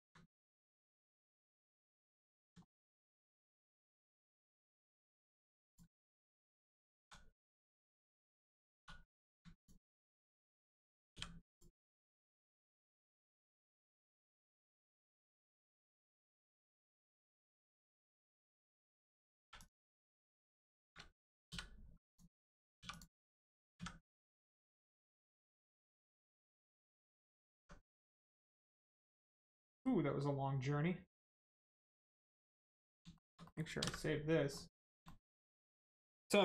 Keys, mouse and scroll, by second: 0.4 middle click, 2.1-2.5 scroll down 1, 2.6 shift+middle click, 2.9 middle click, 3.0 middle click, 5.6 click, 6.0 shift+middle click, 6.2 middle click, 8.7 2, 9.1 click, 9.5 alt+click, 10.2 middle click, 11.5 click, 11.8 scroll down 1, 12.1 middle click, 14.5 Tab, 15.9 middle click, 17.7 scroll up 1, 18.5 Tab, 19.4 1, 19.5 click, 20.3 shift+click, 22.1 click, 22.7 2, 22.8 click, 25.0 click, 25.9 middle click, 26.2 scroll down 1, 26.5 middle click, 27.0 Tab, 27.3 middle click, 27.5 Tab, 28.0 middle click, 30.1 middle click, 33.1 shift+middle click, 33.4 middle click, 34.5 middle click, 34.8 scroll down 1, 35.0 shift+middle click.